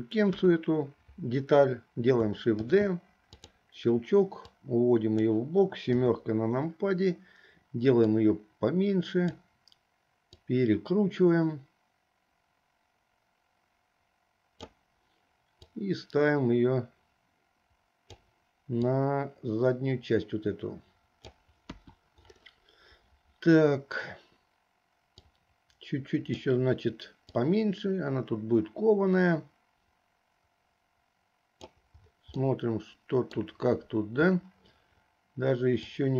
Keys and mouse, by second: 0.4 KP_1, 2.7 shift+d, 4.7 click, 6.0 KP_7, 8.3-9.6 drag, 10.5-14.9 drag, 15.7-18.5 drag, 19.0-21.5 drag, 21.8 KP_1, 25.5-26.5 drag, 27.4 click, 29.4-31.8 drag, 32.6 middle click, 35.9-36.1 drag.